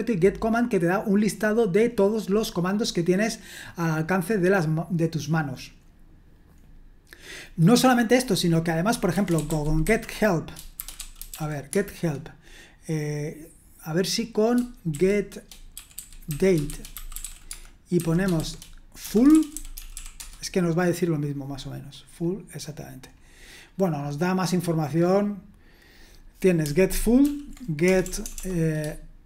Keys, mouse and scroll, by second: 3.6-5.7 scroll down 1, 5.7-7.6 scroll down 1, 7.8 click, 8.9-12.2 typing, 14.9-20.4 typing, 22.1-23.1 scroll up 1, 23.1-25.7 scroll up 1, 27.2 ctrl+p, 27.8-29.2 typing.